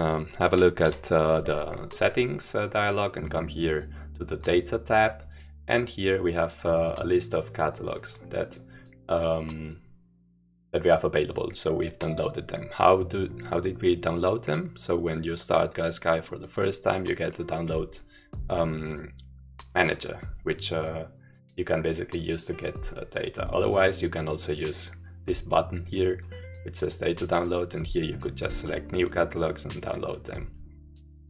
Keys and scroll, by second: 1.1 p.